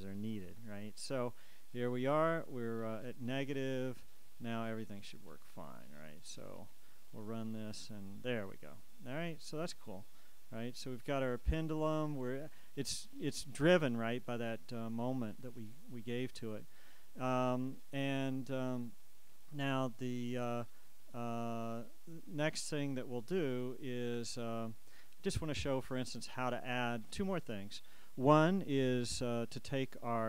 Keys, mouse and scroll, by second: 0.7 KP_Subtract, 2.7 click, 3.9 click, 5.1 click, 6.4-8.1 drag.